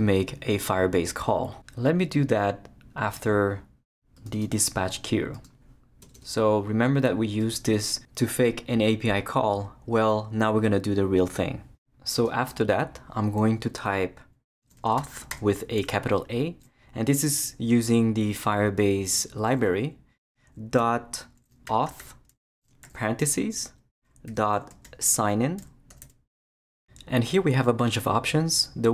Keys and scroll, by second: 6.0 Return, 14.5-15.8 typing, 21.3-26.5 typing.